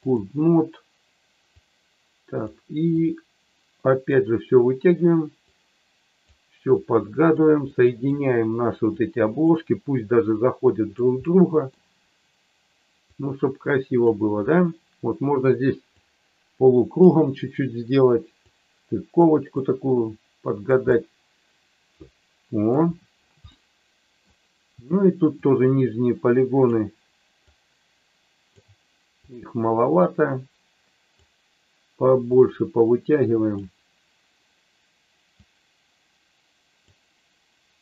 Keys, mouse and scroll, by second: 1.5 click, 3.0-4.1 drag, 5.5 click, 6.8 click, 7.6 middle click, 8.9 click, 10.3 click, 11.2 middle click, 13.1 click, 15.9-17.0 drag, 18.4 click, 19.5-20.7 drag, 20.9-22.6 middle drag, 23.4 middle click, 25.4-26.8 drag, 27.5-28.6 drag, 29.2-31.2 drag, 32.2-33.6 drag, 35.4-36.7 drag.